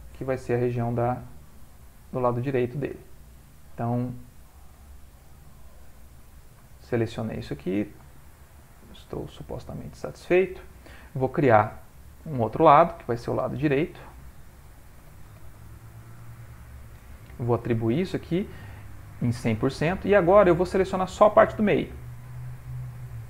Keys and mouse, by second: 0.8 alt+shift+click, 1.2 middle click, 2.5 alt+shift+click, 4.4 middle click, 5.2 c, 6.7 middle click, 9.0 shift+click, 9.6 middle click, 10.4 ctrl+middle click, 10.6 ctrl+middle click, 12.2 click, 13.6 click, 14.8 click, 18.0 click, 20.4 middle click, 21.4 alt+click, 22.7 alt+shift+click.